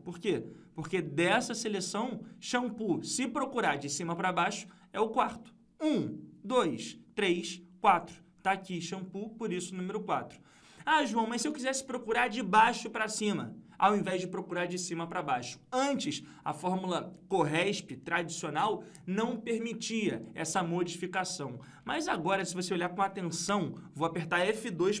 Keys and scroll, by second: 0.2 F2.